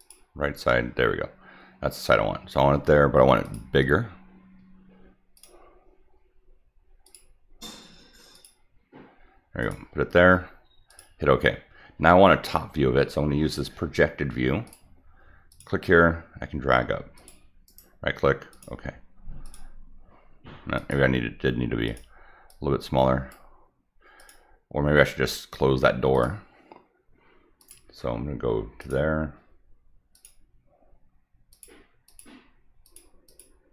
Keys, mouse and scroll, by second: 0.0 click, 3.4 click, 5.3 click, 7.0 click, 8.3 click, 9.6 click, 10.9 click, 14.6 click, 15.5 click, 17.1 click, 17.6 right click, 18.5 click, 19.4 click, 20.7 click, 21.8 click, 22.5-23.3 drag, 24.2 click, 26.1 click, 27.6 click, 28.8 click, 30.1 click, 31.5 click, 32.0 click, 32.8 click, 33.2 click.